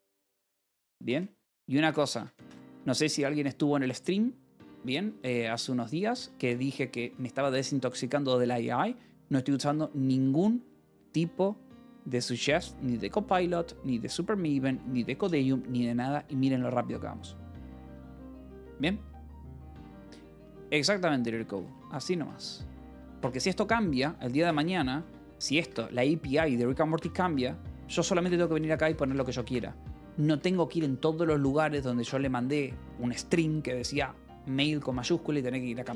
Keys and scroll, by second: 0.0-1.9 typing, 2.0 Escape, 3.0 ctrl+s, 5.3 space, 6.0 Escape, 6.3 j, 7.4 ctrl+s, 20.4 ctrl+s, 21.1-23.6 typing, 24.6-25.8 typing, 27.9-29.3 typing, 29.2 Escape, 30.2 Escape.